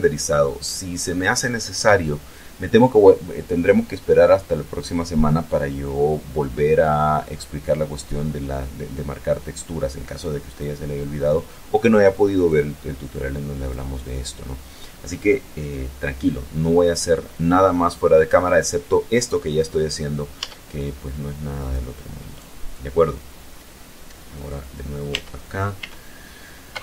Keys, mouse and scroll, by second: 9.9 click, 11.9 click, 13.1 click, 19.8 Tab, 21.0 right click, 21.7 right click, 24.5 Tab, 26.2 u.